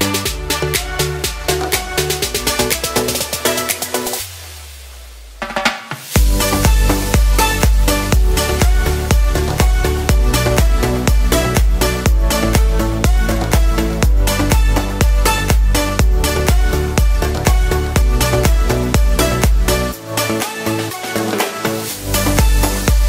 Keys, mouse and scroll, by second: 0.6 click, 6.3 click, 15.4 middle click, 15.9 shift+middle click, 16.3 scroll down 1, 16.5 shift+middle click, 17.0 middle click, 20.4 shift+middle click.